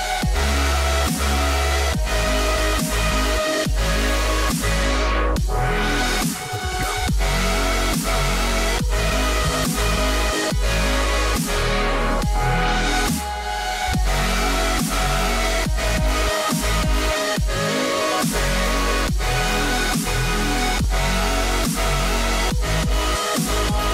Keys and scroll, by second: 7.5 ], 9.9 8, 10.1 0, 10.4 Return, 12.0 [, 19.0 ].